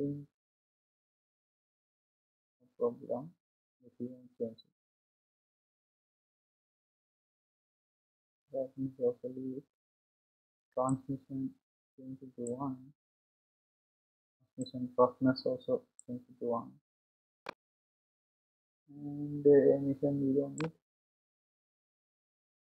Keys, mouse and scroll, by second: 0.0-5.0 drag, 11.4-22.7 drag.